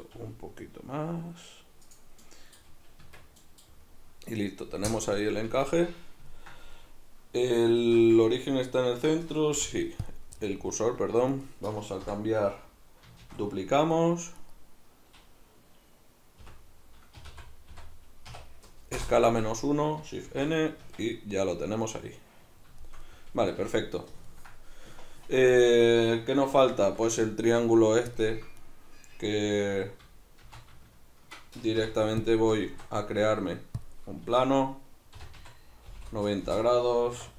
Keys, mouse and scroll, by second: 0.1 g, 1.9 click, 2.2 middle click, 2.5-3.0 scroll down 2, 3.0 Tab, 3.4 middle click, 3.7-4.4 scroll down 2, 4.4-5.5 scroll up 2, 5.5 Tab, 6.3-7.8 ctrl+middle drag, 7.8 alt+q, 8.3-11.4 ctrl+middle drag, 9.6 ., 11.4 right click, 12.0 l, 13.2 shift+d, 14.6 right click, 16.4 o, 19.2-28.6 middle drag, 20.3 shift+n, 20.8 Tab, 23.4 a, 26.8 alt+q, 28.6 right click, 30.4 shift+c, 31.7 ., 32.7 shift+a, 34.2 Tab, 35.1 r, 37.1 1.